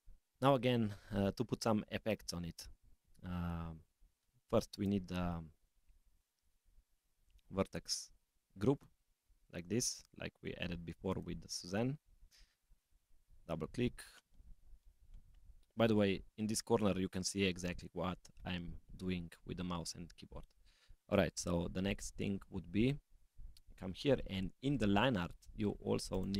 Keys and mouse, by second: 2.9 click, 4.8 click, 7.3 click, 8.7 click, 11.1 click, 11.9 click, 12.7 click, 12.9-15.7 drag, 23.5 click, 26.1 click.